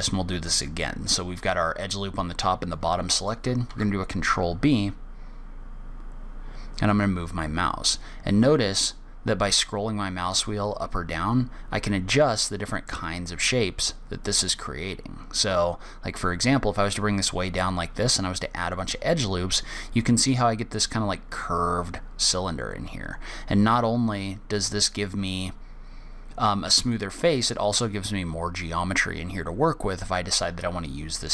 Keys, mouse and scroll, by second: 4.0 ctrl+b.